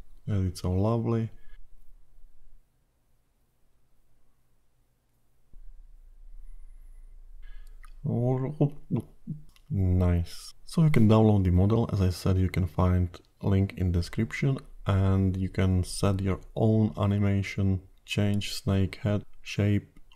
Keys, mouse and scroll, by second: 1.6 click, 3.3 click, 14.0 click.